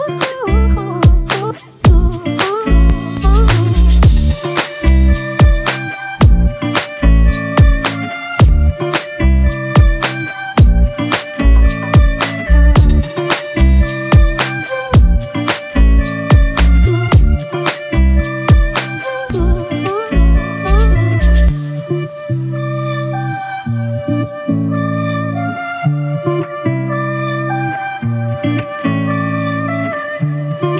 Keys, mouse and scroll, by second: 2.3 alt+shift+click, 11.9 alt+shift+click, 18.2 alt+shift+click, 22.6 Return, 24.7 alt+click, 29.3 ctrl+t.